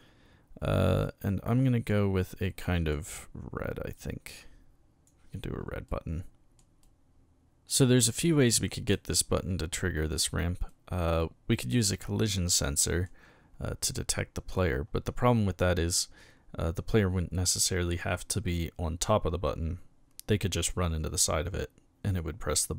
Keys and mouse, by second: 1.6 click, 2.5 click, 4.0-5.0 drag, 5.9-6.6 middle drag, 6.8-7.4 middle drag, 8.0-8.7 middle drag, 8.9 middle click, 10.7-13.0 middle drag.